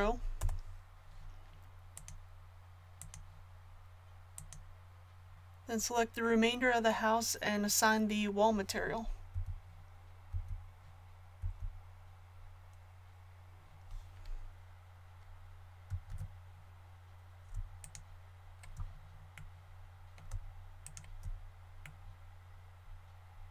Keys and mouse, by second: 9.3 l, 10.3 l, 16.0 ctrl+z.